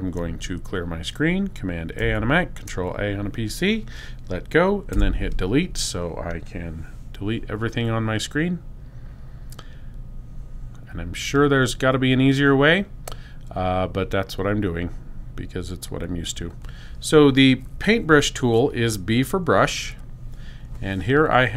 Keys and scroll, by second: 2.0 super+a, 4.4 BackSpace, 19.5 b.